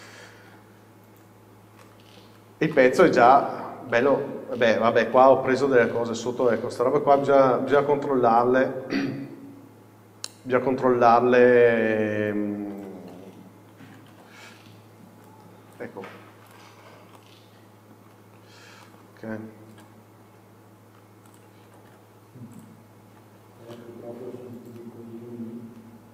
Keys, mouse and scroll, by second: 0.6 KP_7, 1.4-1.9 scroll up 1, 1.9 shift+middle click, 2.8 Tab, 2.8 middle click, 3.1 scroll down 1, 6.2 middle click, 7.1 z, 8.7 scroll up 1, 11.9 scroll down 1, 12.9 z, 13.3 scroll up 1, 16.6 right click, 16.9 scroll down 1, 17.3 middle click, 18.9-19.3 scroll down 1, 19.3-19.8 scroll up 1, 23.2 Tab, 23.5-23.8 scroll down 1, 23.8-24.9 middle drag.